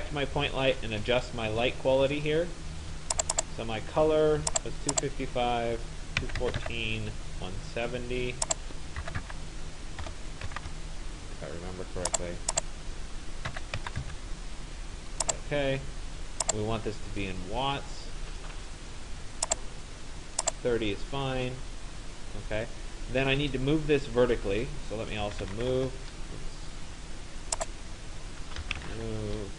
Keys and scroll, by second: 5.9-7.2 typing, 8.9-10.6 typing, 13.3-14.6 typing, 24.8-26.1 typing.